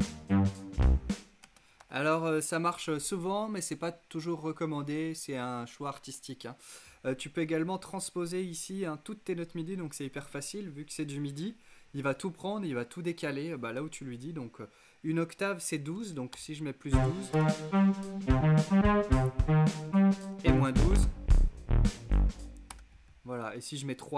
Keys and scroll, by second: 1.0 space, 1.3 super+z, 15.2-16.9 typing, 16.8 Return, 19.4-20.8 typing, 21.4 Return, 22.2 space, 23.1 shift+space, 23.8 shift+'.